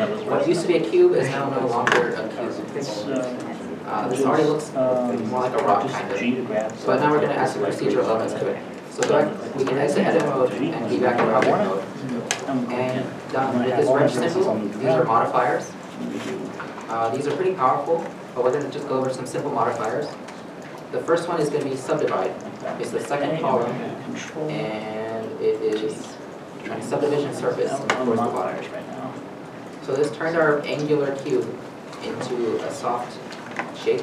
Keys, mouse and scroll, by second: 1.8 scroll down 1, 2.4 middle click, 7.0-7.3 scroll, 7.9 shift+middle click, 10.6 Tab, 11.3 shift+middle click, 13.4 scroll down 1, 29.3 middle click, 29.7 scroll up 1, 30.1 KP_Decimal, 30.5 scroll, 31.2 middle click.